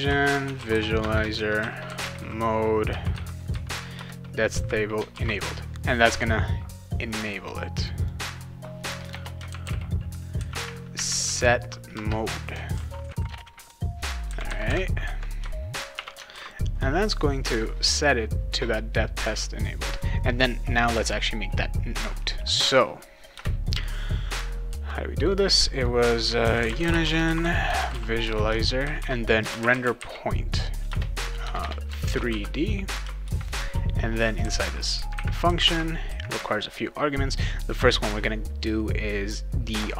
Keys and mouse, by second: 0.0-2.6 typing, 4.0 Return, 4.5 ;, 5.1 ctrl+s, 7.8 click, 8.0 click, 9.1-10.1 typing, 11.9 Return, 12.7 ctrl+s, 13.3 BackSpace, 13.5 shift+9, 15.9 shift+0, 16.3 ctrl+s, 19.9 click, 23.3 Return, 26.2-33.2 typing, 30.9 Return, 34.6 ;, 35.4 ,, 35.7 ,.